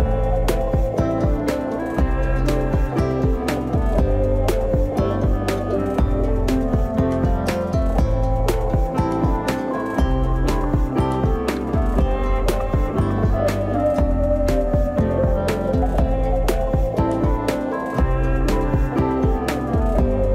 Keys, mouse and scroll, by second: 3.7-6.1 drag, 6.2 ctrl+z, 7.6-9.9 drag, 11.4 middle click, 12.4 click, 13.0 shift+middle click, 13.8 z, 17.1 x, 19.0 click.